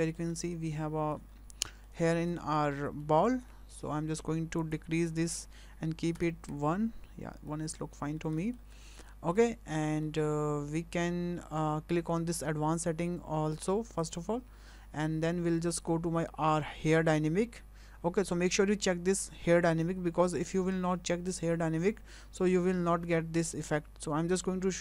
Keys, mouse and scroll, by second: 0.4 middle click, 1.3 scroll up 2, 1.7 shift+middle click, 2.0 scroll up 2, 2.4 shift+middle click, 3.0 shift+middle click, 3.5 shift+middle click, 4.6 click, 7.3 scroll down 2, 7.5 middle click, 8.1-8.9 scroll up 3, 8.4 shift+middle click, 9.1 shift+middle click, 9.3 scroll up 2, 10.0 shift+middle click, 14.0 click.